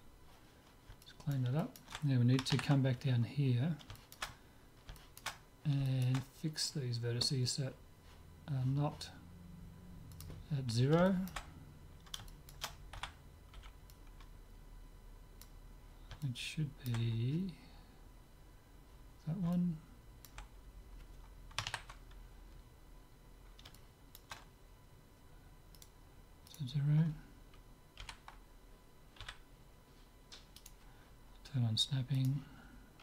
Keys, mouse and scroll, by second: 1.1-7.7 middle drag, 10.1-12.0 drag, 12.0-14.2 middle drag, 13.0 a, 13.6 b, 16.3-18.2 middle drag, 18.0 scroll up 1, 18.2-19.2 scroll down 1, 19.2 scroll down 1, 19.4-21.4 middle drag, 22.5-25.7 middle drag, 25.8-28.4 right drag, 28.0 g, 32.2-33.0 drag.